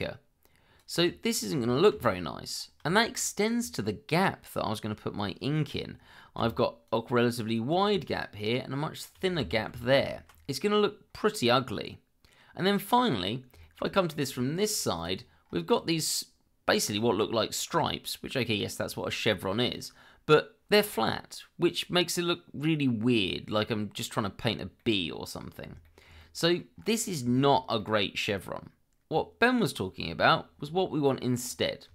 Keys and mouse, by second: 0.0 click, 1.9 ctrl+z, 2.9 shift+middle drag, 3.5 middle click, 6.4 d, 6.9 click, 8.4 click, 9.7 ctrl+z, 11.1-13.0 middle drag, 13.6 shift+middle drag, 13.9 middle click, 14.9 click, 24.8-25.4 middle drag, 25.8 shift+middle drag, 26.2-26.6 middle drag, 27.3 shift+middle drag, 27.8-28.4 middle drag, 31.4 click.